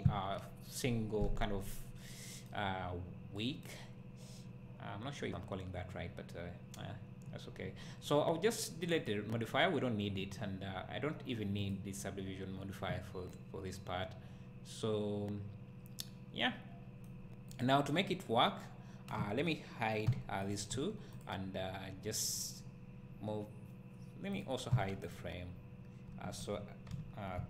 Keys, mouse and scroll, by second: 2.7 scroll up 1, 9.1-13.4 drag, 13.4-17.6 right drag, 17.6 click, 20.1 h, 20.5 click, 20.8 h, 21.2 click, 24.7 h, 25.1 click, 26.1 h.